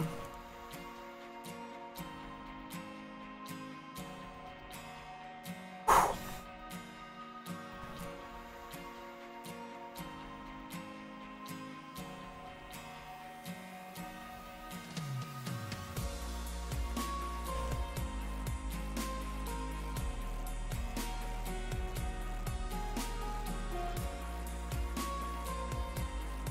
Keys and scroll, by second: 9.1 s.